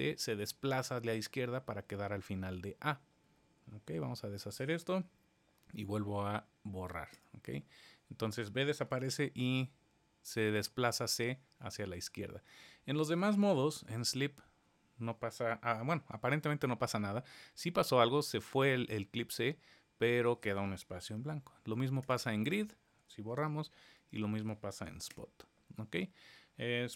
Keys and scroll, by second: 3.8 super+z, 8.9 super+z, 16.6 super+z, 23.2 super+z.